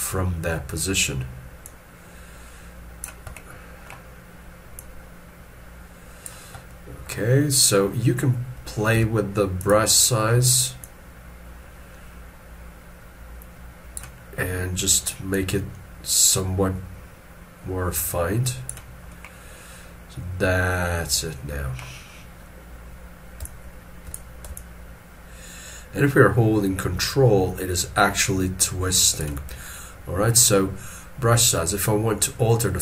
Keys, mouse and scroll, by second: 3.3 middle click, 8.9 f, 19.1 middle click, 23.4 middle click, 23.5 shift+click, 24.5 ctrl+click.